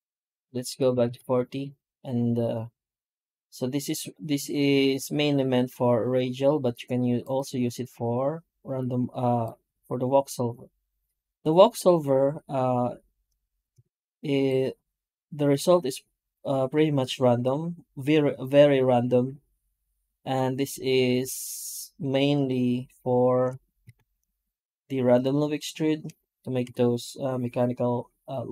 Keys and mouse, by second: 23.8 shift+q, 26.5 F9.